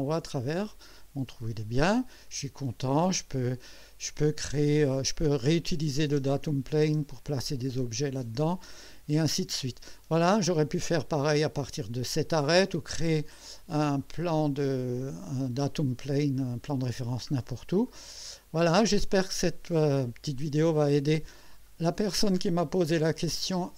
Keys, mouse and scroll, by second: 1.4 click, 2.3-3.1 drag, 3.8 click, 5.7 click, 6.1 space, 6.8 space, 7.7-9.4 drag, 10.0 scroll up 2, 17.3 scroll down 1, 17.9-21.5 drag, 21.7-22.3 right drag, 22.5-23.7 drag.